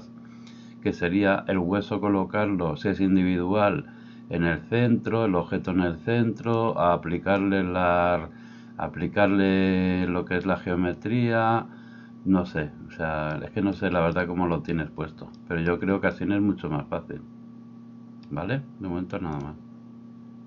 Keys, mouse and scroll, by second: 6.5-20.4 drag.